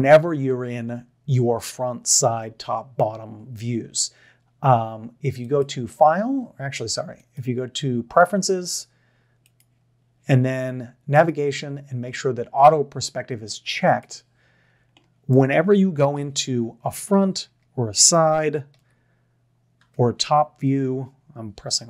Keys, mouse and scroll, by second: 15.3 middle click, 16.2 KP_1, 17.4 KP_6, 18.8 KP_3, 20.0 KP_8.